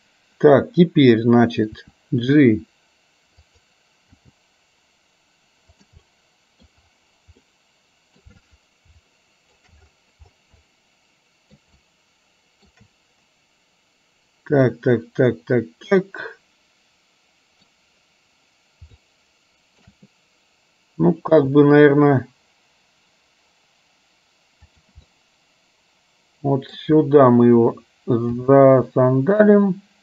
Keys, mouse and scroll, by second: 1.9 r, 4.4 g, 6.1 middle click, 7.6 middle click, 9.2 shift+middle click, 10.7 middle click, 11.9 shift+middle click, 14.9-17.7 middle drag, 19.1 shift+middle click, 21.5 g, 25.2-26.9 middle drag, 28.5 g.